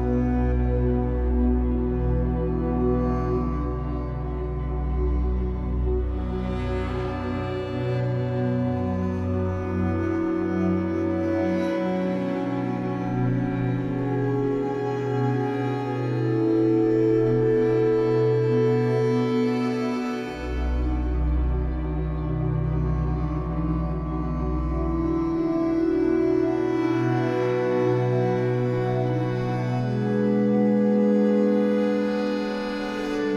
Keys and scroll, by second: 1.2 2, 1.8 Caps_Lock, 6.3 shift+w, 8.0 Escape, 12.8 1, 18.5 w, 26.0 ctrl+z, 27.8 Escape, 28.0 2, 29.0 w.